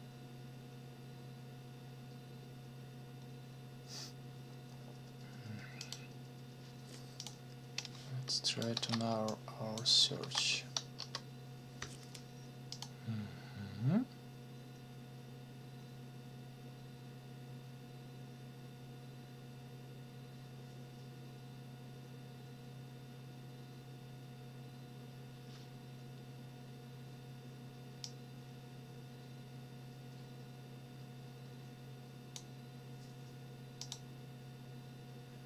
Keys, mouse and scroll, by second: 5.8 click, 7.2 click, 7.8 click, 8.7 ctrl+c, 9.3 ctrl+click, 10.2 ctrl+v, 11.0 Return, 12.7 click, 28.0-32.5 drag, 33.8 click.